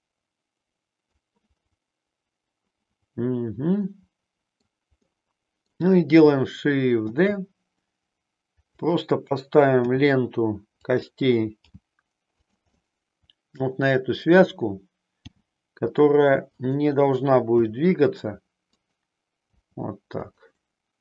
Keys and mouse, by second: 1.6-4.7 middle drag, 5.0 middle click, 7.1 shift+d, 8.8 click, 9.7 r, 11.0 click, 11.6 g, 12.4 click, 12.7-14.3 middle drag, 15.2 g, 16.6 click, 17.4 r, 18.7 click, 19.4 g, 20.1 click.